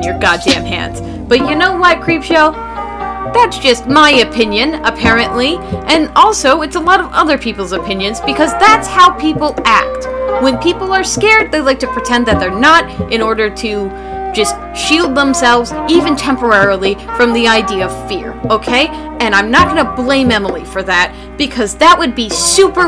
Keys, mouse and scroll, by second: 1.0 [.